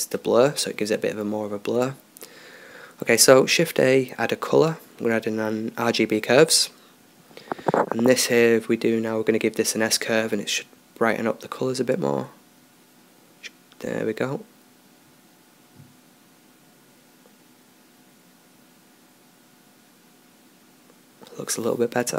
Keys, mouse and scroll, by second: 2.2 shift+a, 7.1-9.0 drag, 9.0-10.3 middle drag, 20.0 click.